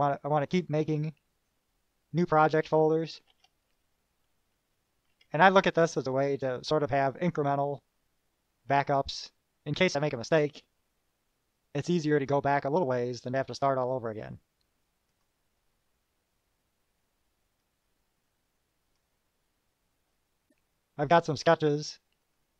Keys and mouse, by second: 1.7 click, 3.5 shift+p, 5.1-6.0 typing, 6.7 click, 15.3 click, 17.8-19.3 drag, 22.4 click.